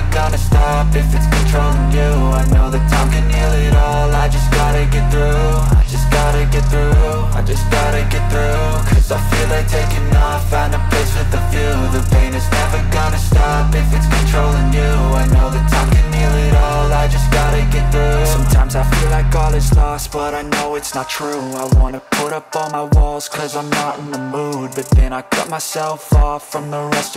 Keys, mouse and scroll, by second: 0.0-0.3 typing, 4.4 right click, 6.0-7.2 typing, 8.2 Delete, 10.2 ctrl+d.